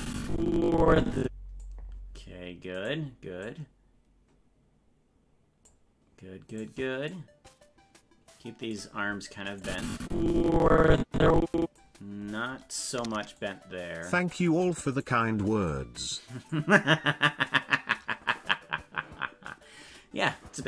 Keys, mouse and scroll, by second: 2.8 right click, 3.4-5.7 drag, 6.6 right click, 7.1-8.7 drag, 9.6-11.8 drag, 13.4 click, 15.0 right click, 15.7 click.